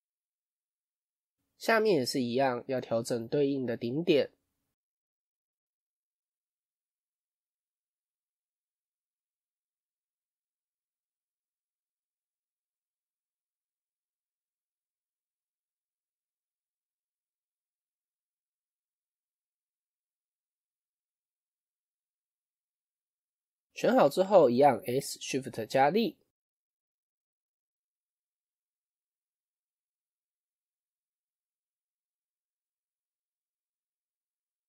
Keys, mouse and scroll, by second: 7.1 shift+click, 7.6-8.8 middle drag, 8.8 shift+click, 9.2-10.5 middle drag, 10.5 shift+click, 11.0-12.4 middle drag, 12.4 shift+click, 12.8-14.1 middle drag, 14.1 shift+click, 14.5-15.9 middle drag, 15.9 shift+click, 16.2-17.5 middle drag, 17.5 shift+click, 17.8-20.1 middle drag, 20.1 shift+click, 20.4-21.5 middle drag, 21.5-21.8 scroll down 2, 21.8 middle click, 22.4 KP_1, 23.1 scroll up 1.